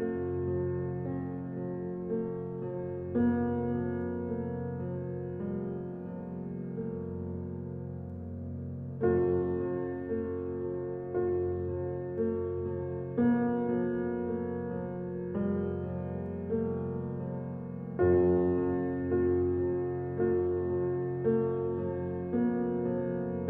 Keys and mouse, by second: 0.0 click, 2.8 ctrl+z, 3.1 ctrl+z, 5.3 click, 6.2 click, 7.7 click, 7.9 click, 8.1 click, 9.6 click, 10.5 ctrl+alt+click, 11.8 click, 12.8-14.8 drag, 15.2 m, 16.6 click, 17.7-18.9 drag, 20.8 click, 22.0-22.5 typing, 23.2 Escape.